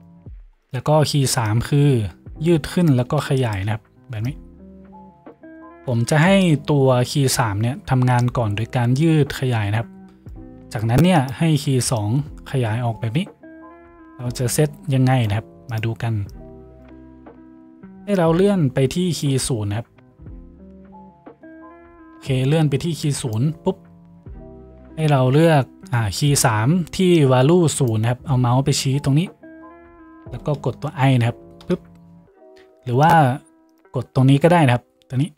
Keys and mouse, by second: 0.7 middle click, 1.5-11.3 drag, 11.3 middle click, 12.1-15.9 drag, 15.9 middle click, 16.3-33.3 drag, 31.7 i, 33.3 middle click, 33.7 click, 33.9-35.3 middle drag.